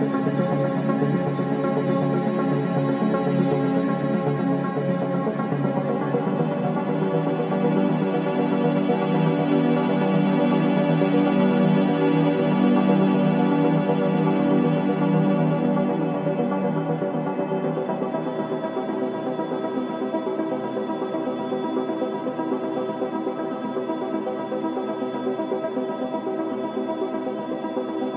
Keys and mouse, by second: 4.2 r, 6.2 s, 7.4 g, 9.7 s, 25.9 click, 27.4 click.